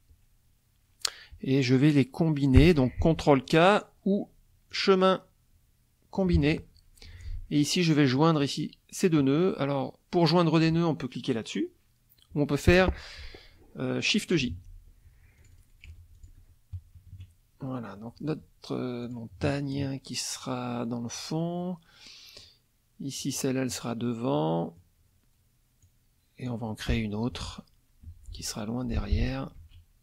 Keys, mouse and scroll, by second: 4.7 click, 6.1 click, 7.1 F2, 7.6 click, 14.5 shift+j, 15.4 click, 15.9 F1, 16.1 click, 17.0 KP_Subtract, 18.0 middle click, 19.0 click, 19.5 middle click, 21.6 middle click, 23.2 click, 24.4 click, 25.8-26.7 drag, 27.3 F2, 27.4 click, 28.0 F1, 29.0 F2, 29.6 ctrl+a.